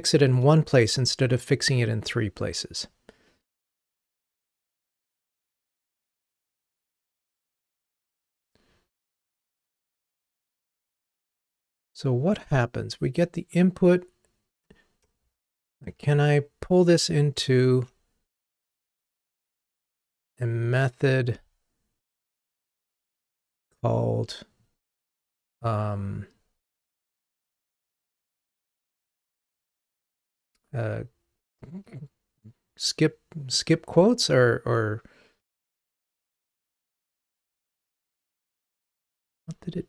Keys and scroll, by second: 16.1 alt+super+m, 16.5 alt+super+m.